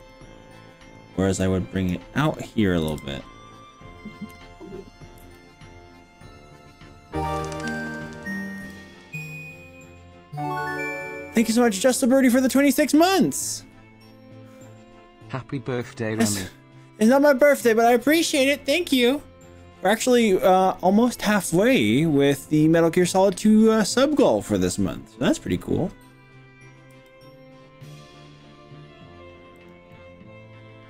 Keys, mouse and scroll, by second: 0.0 click, 0.6 middle click, 1.4 click, 2.9 g, 5.2 y, 7.5 click, 8.1 click, 8.7 y, 26.9 g, 29.7 click, 29.9-30.8 middle drag.